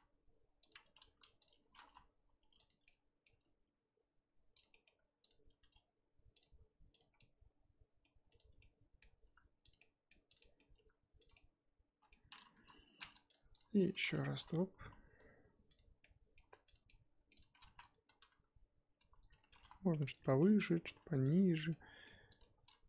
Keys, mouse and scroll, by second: 1.1 shift+d, 1.6 r, 2.8 middle click, 3.3 r, 4.7 middle click, 5.3 click, 5.6 r, 7.0 click, 7.2-8.4 middle drag, 8.4 click, 8.6-9.2 middle drag, 9.2 r, 9.8-10.3 middle drag, 10.3 click, 10.4-10.7 middle drag, 10.7 r, 11.3-12.5 middle drag, 12.5 KP_7, 13.3 shift+click, 13.6 shift+click, 13.9 shift+d, 14.3 r, 16.0-16.7 middle drag, 16.7 click, 16.8-17.3 middle drag, 17.3 click, 17.7 z, 18.2 r, 19.5 g, 20.2-20.6 middle drag, 20.6 click, 20.8 g, 21.7-22.3 middle drag, 22.3 click.